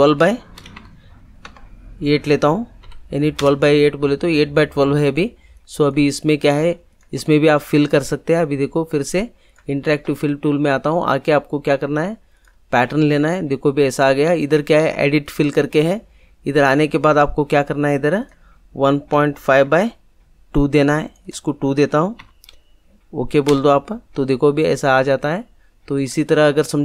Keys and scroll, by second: 0.5 1, 1.0 2, 1.4 Tab, 2.8 8, 3.3 Return, 19.1 1, 19.3 ., 19.7 5, 22.1 2, 23.4 Return.